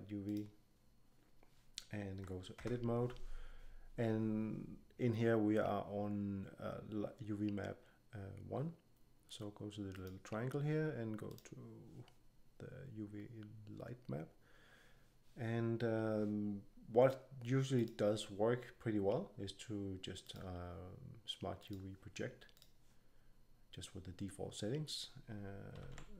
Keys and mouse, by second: 2.5 Tab, 9.9-19.6 drag, 20.2-22.8 drag, 25.7 a, 25.8 a.